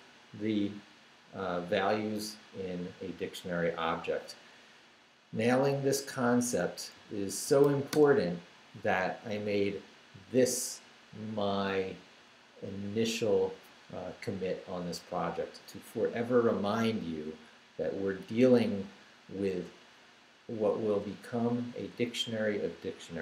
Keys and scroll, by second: 6.5-8.1 typing.